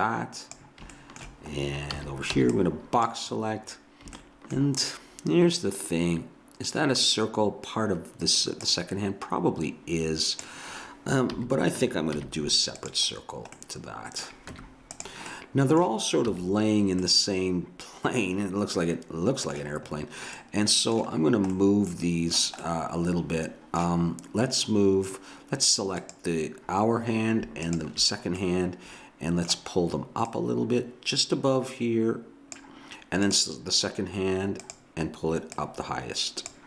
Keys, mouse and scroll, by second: 2.0 a, 2.4 b, 8.6-10.4 drag, 11.3 a, 12.2 z, 13.6 middle click, 14.6 Tab, 16.3 a, 17.4 middle click, 18.8 middle click, 20.0-24.9 middle drag, 26.0-29.7 drag, 28.4-30.2 middle drag, 30.3-32.2 drag, 33.3 click.